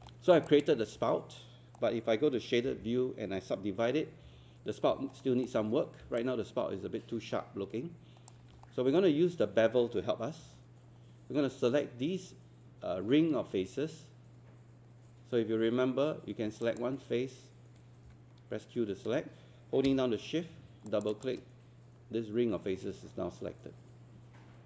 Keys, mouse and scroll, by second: 5.1 alt+scroll up 1.